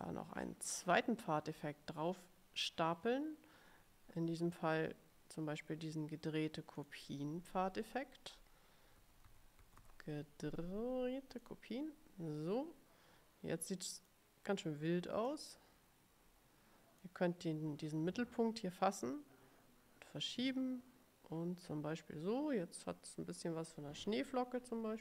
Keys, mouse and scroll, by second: 6.9 click, 8.9-10.6 typing, 11.5 click, 14.1 click, 15.4-17.3 drag, 19.2-25.0 drag.